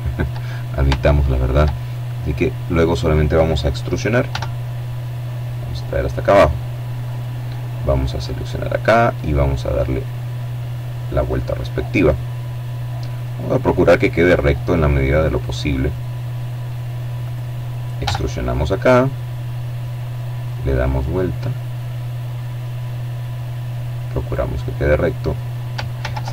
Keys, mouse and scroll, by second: 1.2 right click, 2.9 e, 5.6 click, 6.7 right click, 7.7-14.5 right drag, 14.3 click, 15.7 right click, 16.5 e, 18.5 click, 19.3-23.6 right drag, 23.0 click, 24.5 ctrl+z, 25.5-26.3 middle drag.